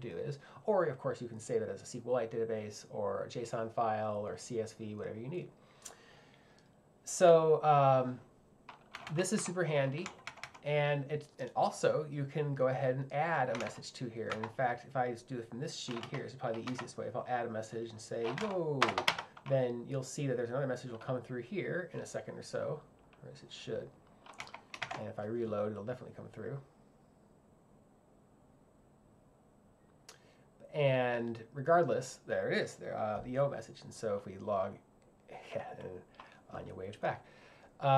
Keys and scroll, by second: 9.0 k, 10.1 j, 13.4-14.3 typing, 15.9 z, 16.7 a, 18.4 y, 18.9 shift+1, 19.1 Return, 24.4 j.